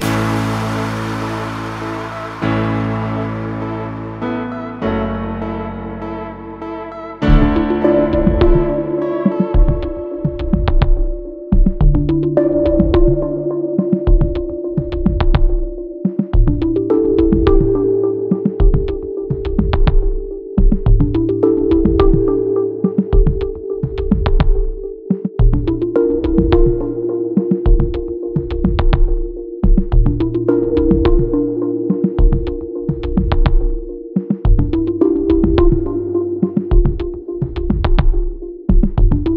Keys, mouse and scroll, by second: 2.1 click, 4.5 ctrl+click, 6.5 click, 8.3 click, 10.2 click, 11.5 click, 12.6 ctrl+click, 13.7 click, 14.2 click, 15.9 ctrl+r, 16.7 ctrl+click, 17.7 ctrl+r, 18.6 ctrl+click, 19.6 ctrl+r, 20.4 ctrl+click, 21.3 ctrl+r, 22.3 ctrl+click, 23.7 ctrl+r, 24.1 click, 24.9 ctrl+click, 26.1 ctrl+r, 27.2 double click, 29.4 click, 30.6 click, 33.1 click, 33.5 double click, 34.7 ctrl+click, 36.1 click, 37.4 click, 39.2 ctrl+click.